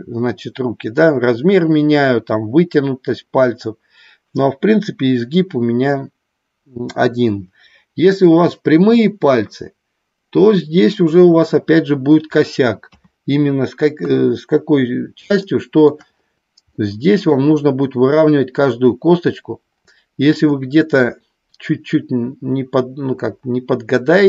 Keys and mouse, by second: 12.8 KP_3, 13.9 KP_1, 15.4 shift+middle click, 16.7 middle click, 20.4 middle click.